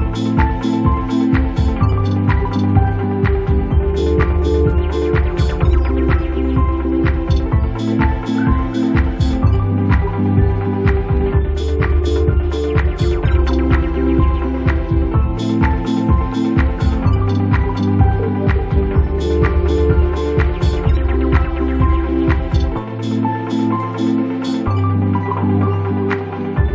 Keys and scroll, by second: 19.5 ctrl+z.